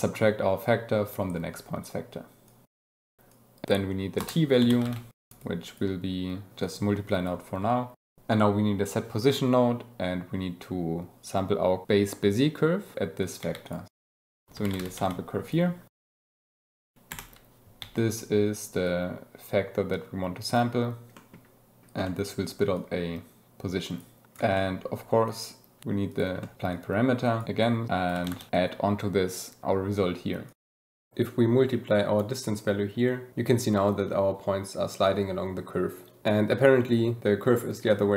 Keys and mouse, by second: 1.4 click, 2.2-2.8 drag, 3.2 g, 3.3-3.7 drag, 5.3 click, 5.6-6.7 drag, 7.0 click, 8.2 shift+a, 9.7 drag, 10.1 click, 10.7 click, 11.0 click, 13.9-14.3 drag, 16.4 g, 16.6 click, 16.8 middle click, 17.0 shift+p, 17.7 g, 18.0 drag, 18.8-19.7 drag, 20.7 click, 22.0 click, 22.7-23.9 drag, 24.2 click, 24.5 click, 25.2 click, 25.9 shift+d, 27.4 g, 28.4 click, 28.7 click, 29.1-29.7 drag, 30.4 drag, 30.8 click, 31.9 click, 33.5-36.3 shift+drag.